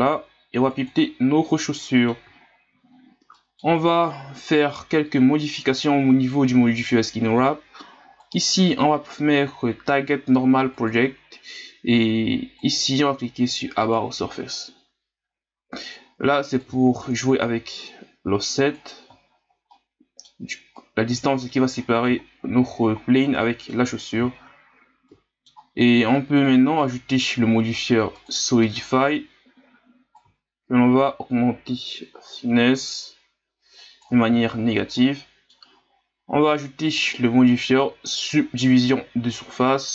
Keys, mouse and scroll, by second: 1.6 middle click, 2.5 scroll down 2, 2.9 scroll up 1, 3.3-6.3 middle drag, 8.1-11.2 drag, 12.6-15.6 drag, 16.5-19.3 drag, 19.3-19.7 scroll down 5, 19.7-22.2 middle drag, 22.2-22.9 scroll down 3, 22.9 scroll down 2, 23.4-24.3 middle drag, 24.3-25.1 scroll up 4, 25.1-26.4 middle drag, 26.4-29.8 drag, 30.2-33.2 drag, 34.5 scroll down 5, 34.9-36.9 middle drag, 36.9-39.9 drag.